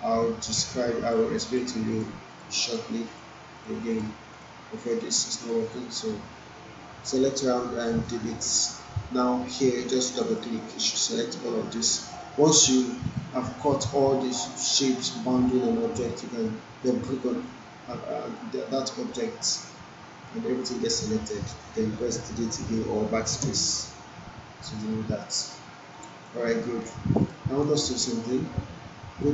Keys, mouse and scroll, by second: 5.3 alt+middle click, 8.0 Delete, 10.0 click, 12.4 click, 12.5 alt+right click, 12.9 alt+middle click, 13.5 alt+click, 16.7 click, 17.6-18.5 alt+drag, 23.4 BackSpace, 24.8-26.3 alt+drag, 26.4 alt+middle click, 26.8-27.6 alt+click, 27.2 right click, 27.6 alt+right click, 27.8 alt+middle click.